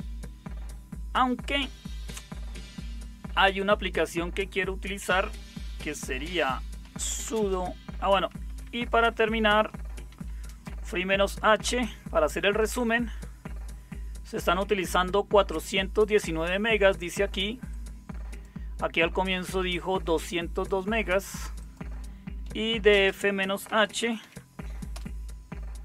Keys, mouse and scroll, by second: 6.5-12.1 typing, 22.4 click, 22.4-24.9 typing.